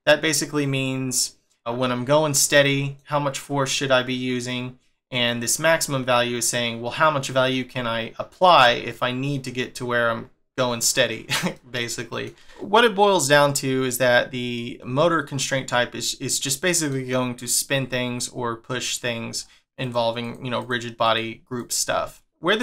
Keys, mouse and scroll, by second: 1.1 middle click, 2.6 middle click, 11.5 middle click, 16.3 middle click, 17.9 middle click, 19.3 scroll down 4, 19.6 click, 19.8 click, 20.2 click, 20.6 click, 21.0 click, 21.6 click, 21.9-22.3 scroll down 3, 22.3 middle click.